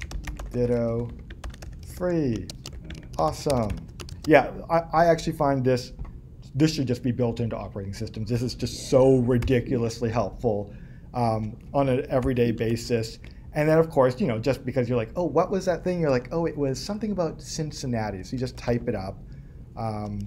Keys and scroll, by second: 0.0 Up.